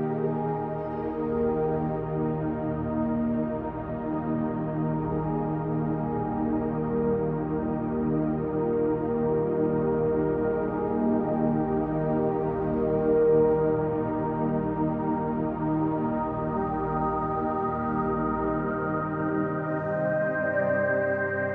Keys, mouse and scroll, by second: 1.8 click, 2.0-3.4 middle drag, 3.4 click, 4.3 middle click, 4.8 shift+click, 5.8 f, 6.3 click, 6.7 g, 7.9 click, 8.6 KP_1, 9.7 e, 13.8 click, 14.3 e, 15.5 click, 15.9 e, 17.3 click, 19.6 f.